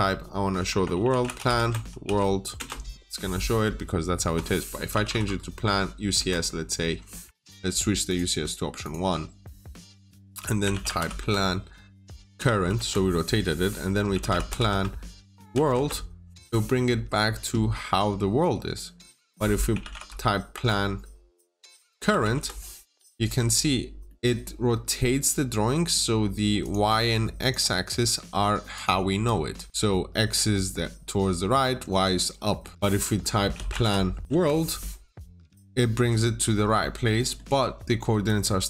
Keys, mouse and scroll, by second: 0.8-1.9 typing, 1.6 Return, 2.5 Return, 4.9 typing, 6.0 Return, 7.1 Escape, 7.9 click, 9.1 scroll down 1, 9.3 middle click, 10.6 typing, 12.2 Return, 12.4 typing, 12.6 Return, 14.0-14.4 typing, 15.4 Return, 15.6 w, 17.0-19.6 scroll down 1, 19.7-20.4 typing, 21.8 Return, 22.0 typing, 22.2 Return, 24.9 middle click, 25.0-25.4 scroll up 1, 25.4-26.5 scroll down 2, 25.6 middle click, 26.5 click, 27.8 Return, 27.8 typing, 27.8 Return, 28.0 Tab, 28.6 click, 29.7-32.1 scroll up 1, 32.1 scroll down 1, 32.3 middle click, 32.7-33.3 scroll down 1, 33.4 typing, 34.2 Return, 35.5 middle click, 36.9 scroll down 1, 37.1 middle click.